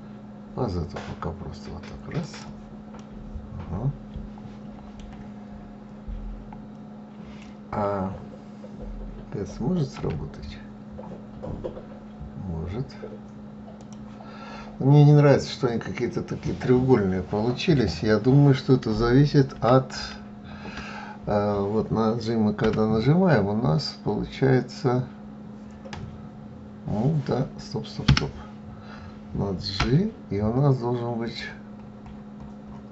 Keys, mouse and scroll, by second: 2.4-5.5 middle drag, 9.4 s, 19.0 ctrl+z, 19.5 ctrl+z, 22.1 g, 29.2 g.